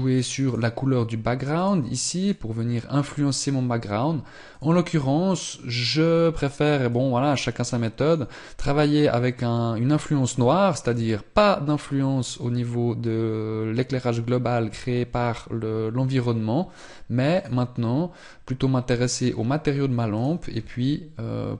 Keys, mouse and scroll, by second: 10.7 click, 17.3 click.